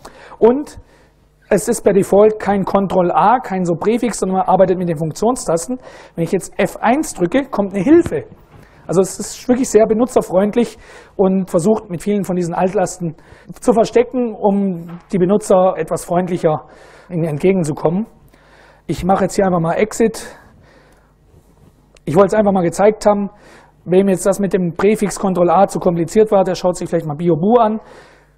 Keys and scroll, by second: 6.3 F1, 18.2 Down, 18.5 Down, 18.7 Down, 19.7 Tab, 20.5 Return.